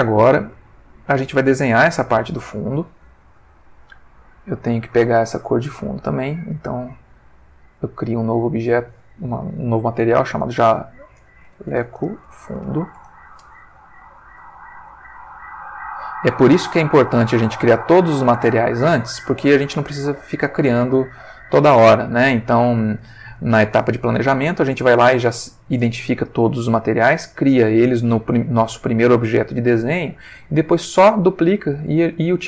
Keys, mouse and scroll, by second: 0.0 ctrl+middle click, 0.7 ctrl+shift+middle click, 3.8 click, 6.7 click, 7.8 click, 8.7 click, 10.3-12.6 typing, 13.0 shift+Return, 14.9 click, 15.5 click, 16.1 click, 17.0 click, 17.9 click, 23.5 ctrl+middle click.